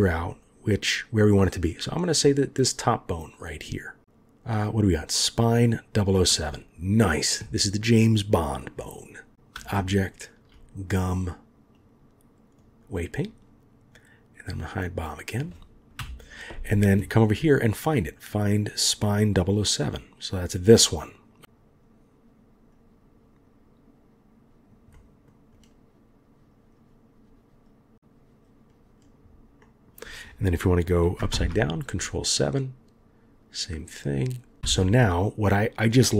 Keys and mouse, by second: 10.2 shift+click, 11.8-12.7 drag, 14.4 click, 15.0 middle click, 16.0 KP_1, 21.4-24.7 drag, 24.9 middle click, 25.5-29.0 drag, 29.6 middle click, 31.3 ctrl+KP_7, 32.4-34.6 drag.